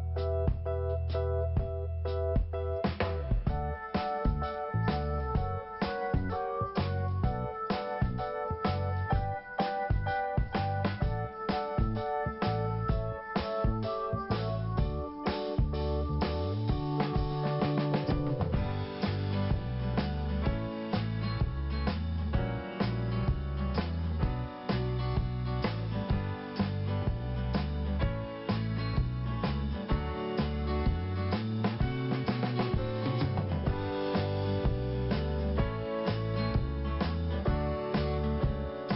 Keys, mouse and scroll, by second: 0.3 scroll up 1, 5.9 scroll down 1, 7.4 click, 11.2 click, 11.3 click, 11.8 click, 11.9 click, 12.9 click, 13.0 click, 15.9 click, 17.9 click, 19.4 click, 25.2 scroll down 1, 25.8-26.1 scroll up 1, 27.1 click, 27.2 click, 28.4 click, 29.6 click, 31.7 click, 34.7 click, 34.7 click, 35.7 click.